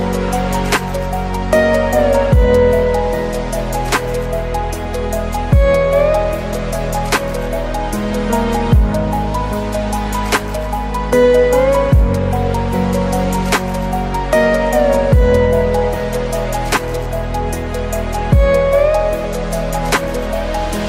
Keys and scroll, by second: 0.7 ctrl+alt+space, 3.7 ctrl+space.